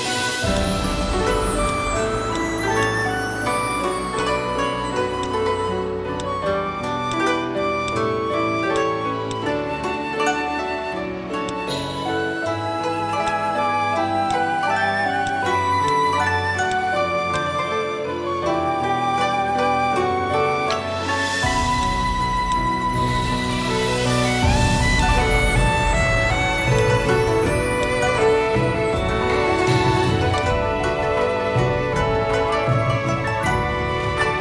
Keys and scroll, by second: 1.2-2.2 typing, 22.0 space, 26.6-28.0 typing, 30.3 space.